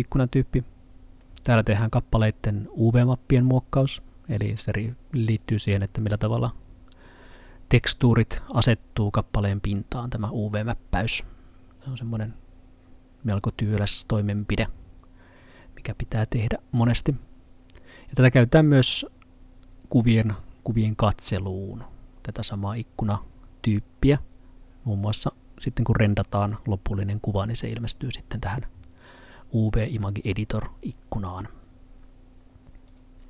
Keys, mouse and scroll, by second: 23.7 click, 32.9 click.